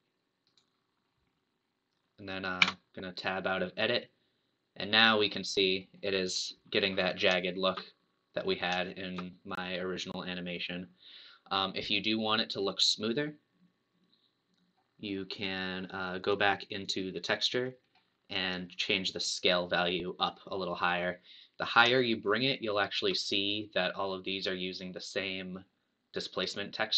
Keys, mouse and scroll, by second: 2.6 Tab, 3.2-6.2 middle drag, 6.6 scroll up 1, 7.4-11.8 shift+middle drag, 14.6 scroll down 1, 16.8 click, 17.8-18.6 scroll down 5, 20.1-23.2 drag.